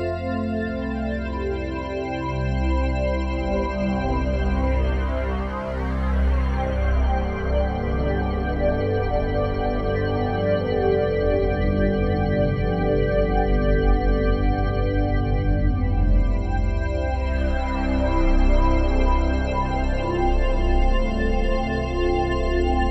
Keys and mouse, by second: 8.6 1, 9.2-11.1 alt+shift+drag, 11.4 click, 12.2 typing, 14.1 click, 18.8 click, 19.9-20.2 typing.